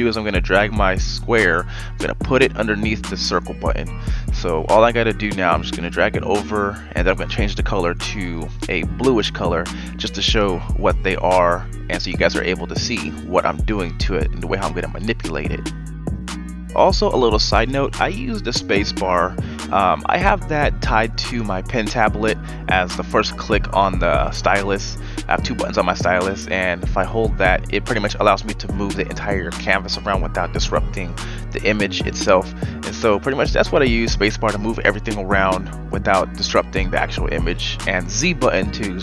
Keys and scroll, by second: 0.4 ctrl+z, 4.4 Delete, 24.2 ctrl+a, 30.2 ctrl+z, 31.6 ctrl+z, 38.7 z.